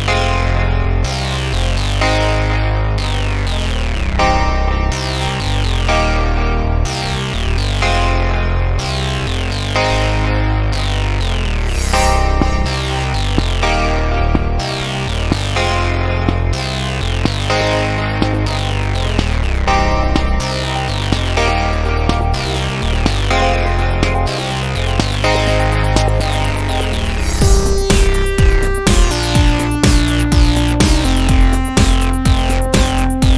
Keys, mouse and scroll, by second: 0.3 KP_5, 0.7 KP_1, 1.4-2.3 middle drag, 2.4-3.5 middle drag, 3.6-6.1 right drag, 6.1 shift+d, 9.1 Tab, 11.1 b, 13.4 b, 15.4 middle click, 16.1 z, 18.2-18.5 ctrl+KP_Add, 18.2-19.4 middle drag, 19.5 x, 21.1 Tab, 21.5 middle click, 21.8 z, 22.2-22.6 middle drag, 24.2 click, 25.2 middle click, 25.8-26.2 middle drag, 26.3 middle click, 26.5 middle click, 27.4-28.0 middle drag, 28.3-29.4 middle drag, 29.4-31.5 drag, 31.4-32.7 middle drag.